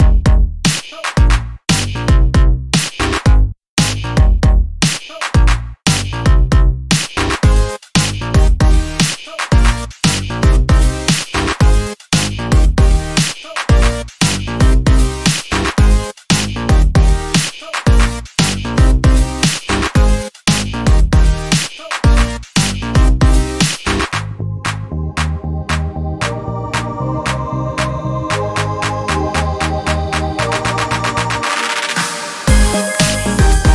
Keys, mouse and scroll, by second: 1.1 click, 3.5 click, 5.1 click, 6.6-8.3 drag, 8.8 Right, 12.5 click, 13.4 Left, 16.1 click, 17.0 Left, 20.2 click, 21.2 Right, 24.2 Right, 25.6 click, 26.7 Left, 28.4-30.2 drag, 30.9 click, 31.7 click, 33.3 click.